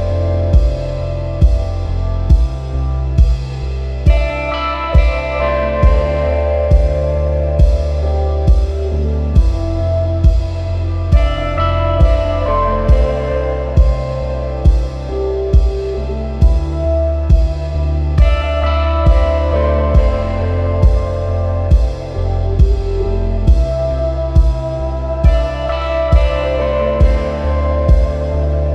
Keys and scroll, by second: 2.7 super+z, 24.9 super+-, 25.3 super+-, 26.1 space, 26.6 space, 26.7 space.